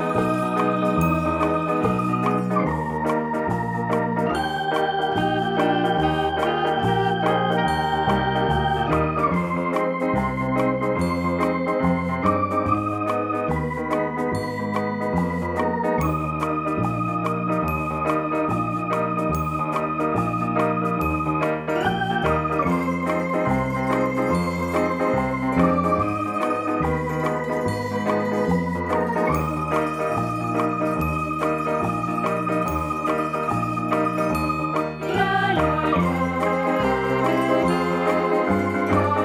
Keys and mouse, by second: 0.5 click, 1.1 click, 2.4 click, 6.0 click, 7.7 click, 8.6 right click, 11.2 click, 13.6 click, 15.4 click, 17.1 right click, 17.9 click, 18.8-19.7 typing, 20.6 click, 22.8 right click, 24.0 click, 26.0 shift+e, 30.5 click, 31.5 click, 32.7 click, 36.1 click, 37.1 click, 37.9 click, 38.4 click.